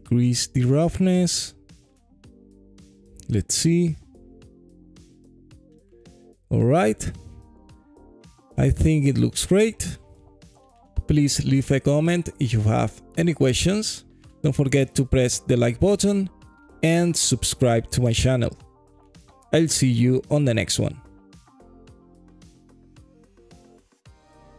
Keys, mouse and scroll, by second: 1.6 middle click, 2.7-3.7 alt+drag, 4.3-5.8 alt+drag, 6.2 alt+middle click, 7.2 alt+click, 8.2 alt+click, 9.1 alt+middle click, 9.4 alt+click, 9.8-10.8 alt+drag, 11.5-12.6 alt+drag, 13.3 alt+middle click, 14.0 alt+click, 14.6 scroll up 1, 15.9 scroll down 1, 16.3-16.6 alt+drag, 16.9 alt+middle click, 17.4 alt+click, 18.5 click, 18.9-20.6 right drag, 21.3 scroll down 2, 21.9 alt+click, 22.8 alt+middle click, 23.3 alt+click.